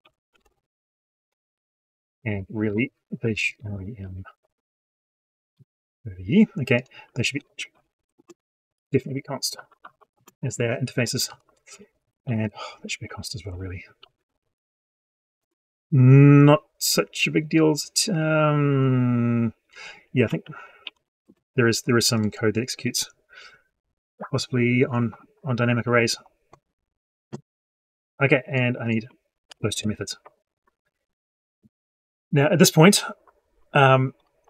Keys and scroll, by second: 29.3 ctrl+shift+c.